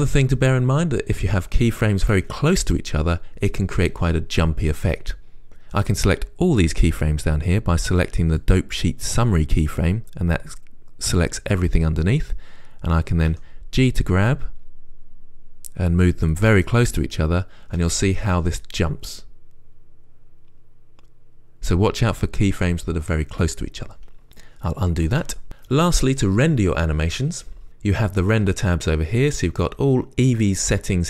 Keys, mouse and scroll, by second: 13.6 g, 16.6 click, 17.9 space, 24.3 space, 25.4 ctrl+z, 25.4 space, 29.8 click.